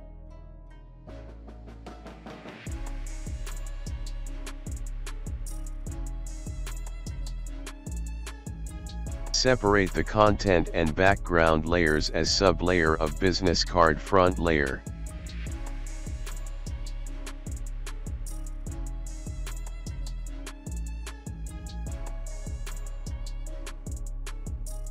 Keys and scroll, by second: 9.2 ctrl+x, 9.6 ctrl+z, 10.1 ctrl+g, 15.2-16.9 typing, 22.4 space.